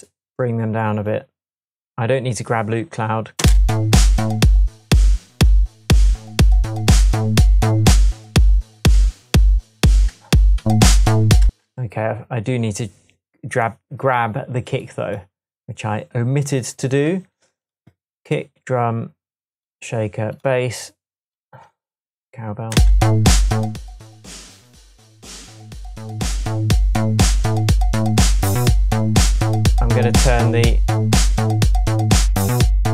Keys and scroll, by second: 3.4 space, 10.6 super+z, 11.5 super+space, 12.1 space, 22.8 space.